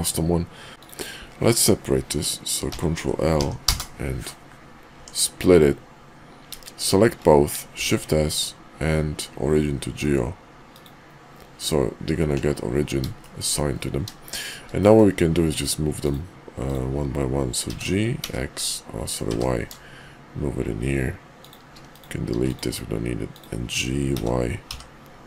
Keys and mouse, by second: 0.7 Tab, 2.6 ctrl+l, 3.2 p, 4.9 Tab, 7.7 shift+s, 13.2 shift+middle click, 14.3 shift+middle click, 14.8 middle click, 15.4 click, 15.9 click, 17.6 g, 22.3 x, 23.3 click, 24.1 g.